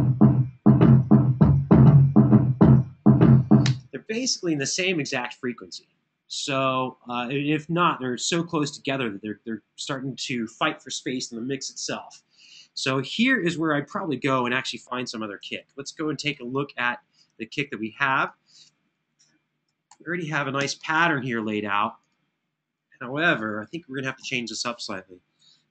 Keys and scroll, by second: 3.4 space, 15.4 super+=, 19.5 super+], 20.0 super+], 23.9 Left, 25.5 Return.